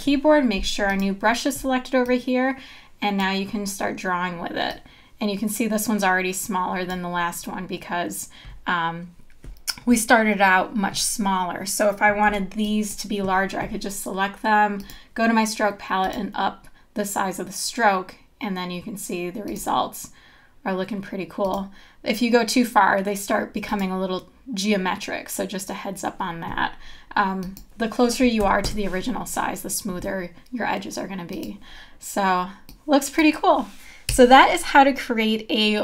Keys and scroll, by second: 12.3 v, 28.4 KP_1, 34.1 BackSpace.